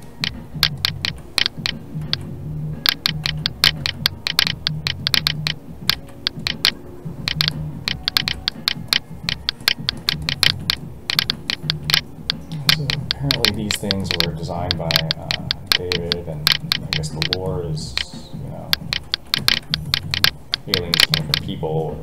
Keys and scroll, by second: 2.0 alt+a, 5.9 alt+a.